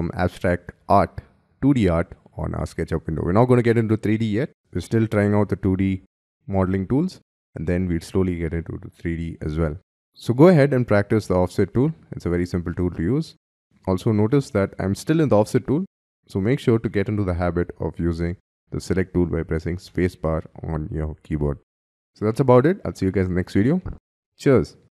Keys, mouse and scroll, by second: 19.9 space.